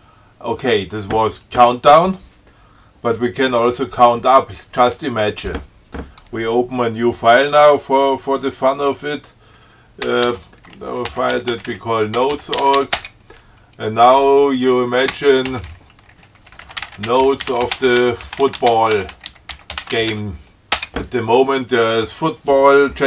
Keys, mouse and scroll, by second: 10.3 ctrl+x, 10.6 ctrl+f, 11.2-13.6 typing, 15.8-20.9 typing.